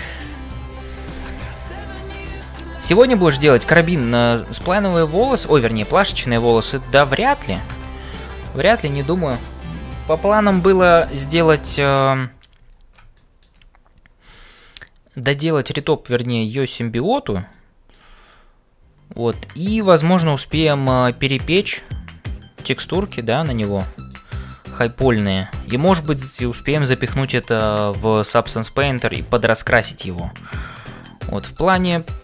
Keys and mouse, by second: 0.0-32.2 typing, 4.8 shift+middle click, 7.1 shift+middle click, 8.1 ctrl+s, 13.3 shift+middle click, 17.5 shift+middle click, 23.9 shift+middle click, 31.5 click.